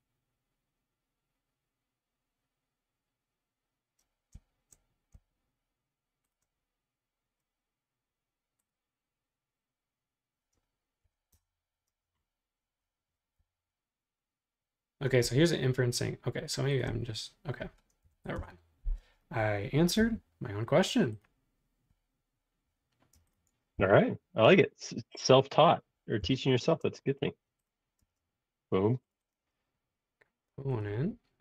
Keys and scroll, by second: 11.0 3, 11.3 Return, 11.9 space, 13.4 c, 18.0 3, 19.0 space, 20.0 m, 23.2 space, 23.8 m, 26.3 p, 28.0 space.